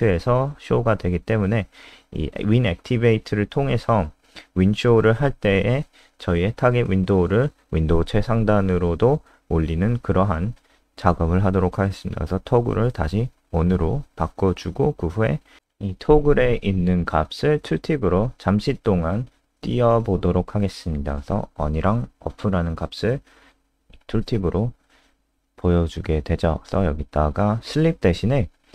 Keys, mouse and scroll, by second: 0.4 ctrl+alt+space, 2.1 Down, 2.8 Up, 3.0 ctrl+Left, 3.8 ctrl+Left, 4.2 shift+End, 4.5 ctrl+c, 4.6 Down, 5.2 ctrl+v, 5.7 ctrl+s, 6.1 Return, 6.8-9.7 typing, 10.4 Down, 11.0 scroll down 2, 12.2 Return, 14.0-19.6 typing, 16.0 ctrl+BackSpace, 20.0 click, 20.2 click, 21.0 Down, 21.2 Down, 24.8-25.8 scroll down 2, 26.1 click, 26.9 Return, 27.3 Up, 28.0-28.7 typing.